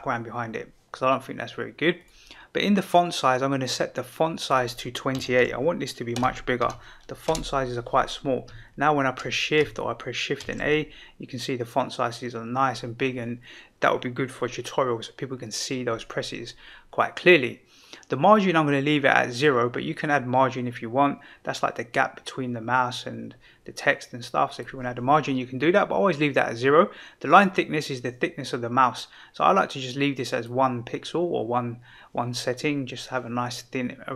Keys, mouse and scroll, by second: 2.0 click, 4.3-7.3 drag, 10.4 shift+a, 19.4-24.6 drag, 27.3-30.4 drag.